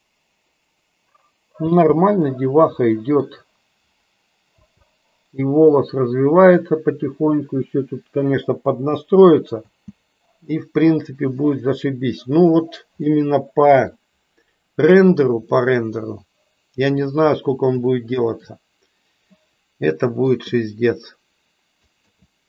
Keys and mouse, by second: 1.7 space, 2.2-3.2 middle drag, 4.5 space, 12.0 space, 13.1 middle click, 15.5-16.9 middle drag, 17.9 shift+middle click, 19.2-20.2 middle drag.